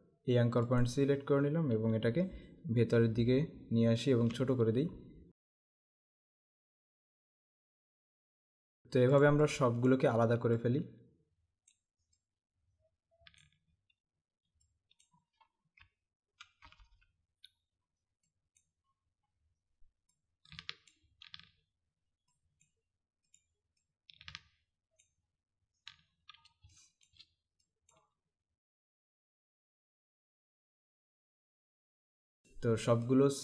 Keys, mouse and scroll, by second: 0.8 click, 2.7 Right, 5.4 click, 5.8 Left, 6.4 click, 7.2 click, 7.9 click, 8.4 Left, 8.8 click, 9.3 click, 14.8 click, 15.8 Right, 18.4 click, 20.2 click, 22.3 click, 26.7 space, 26.7 click, 28.9 click, 30.6 space, 31.3 click, 32.3-33.4 alt+scroll down 1.